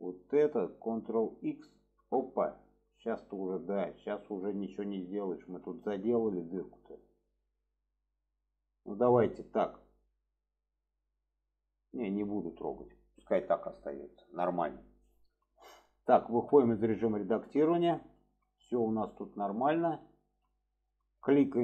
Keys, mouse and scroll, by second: 3.2-3.5 middle drag, 4.0 middle click, 5.8 shift+middle click, 8.3 middle drag, 11.0-11.9 middle drag, 12.3 alt+middle click, 13.5 click, 14.1 shift+middle click, 16.4 Tab, 17.3 middle click, 18.2 middle click, 19.0 middle click, 20.0 shift+middle drag.